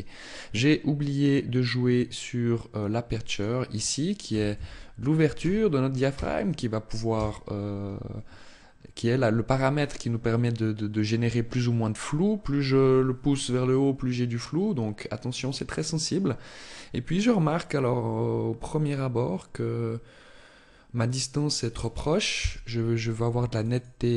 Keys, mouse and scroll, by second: 2.7 click, 22.5 click, 22.9 click, 23.3 click.